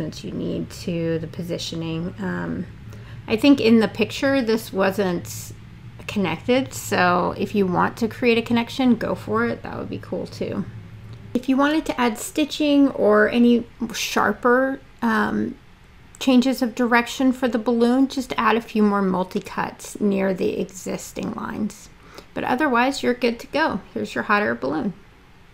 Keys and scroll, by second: 12.5 f.